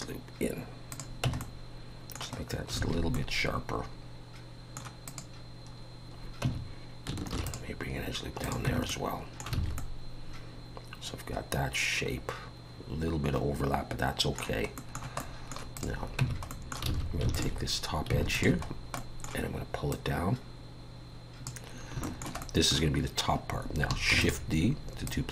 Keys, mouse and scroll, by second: 1.2 Tab, 1.4 middle click, 2.4-2.7 scroll down 2, 2.8 alt+a, 3.1 middle click, 5.1 click, 5.7 scroll up 2, 6.4 Tab, 7.3 ctrl+r, 8.7 Tab, 8.9 middle click, 9.6 alt+a, 9.8 middle click, 10.6 middle click, 14.8 middle click, 15.2 middle click, 15.8 click, 16.2 Tab, 16.5 middle click, 16.9 alt+a, 17.3 alt+click, 18.3 alt+shift+click, 18.7 scroll down 2, 19.0 middle click, 19.9 click, 22.0 shift+middle click, 22.4 middle click, 24.1 shift+d, 25.1 click.